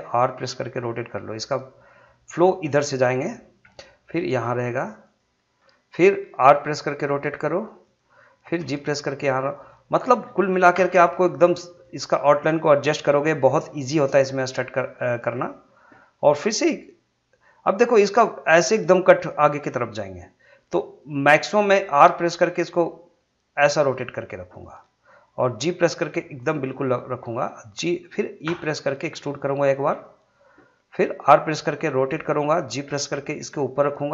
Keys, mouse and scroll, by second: 0.3 r, 2.8 click, 3.6 g, 5.1 click, 6.5 r, 7.8 click, 8.6 g, 9.5 click, 10.7 s, 11.8 click, 15.3 click, 22.0 r, 24.6 click, 25.6 g, 26.5 click, 28.5 e, 29.7 click, 31.3 r, 32.3 click, 32.8 g.